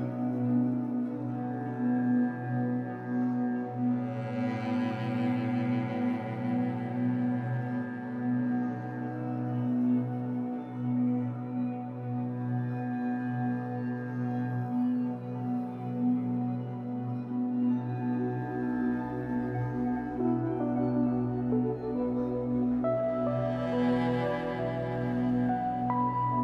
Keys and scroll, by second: 0.2 ctrl+j, 15.3 ctrl+j.